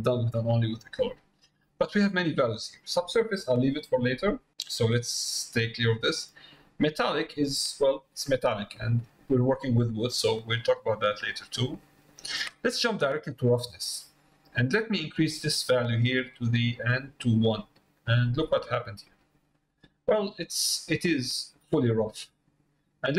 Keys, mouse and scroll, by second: 5.7 middle click, 9.8 middle click, 10.8 middle click, 16.1-17.5 drag, 18.0-20.1 middle drag, 20.7 middle click.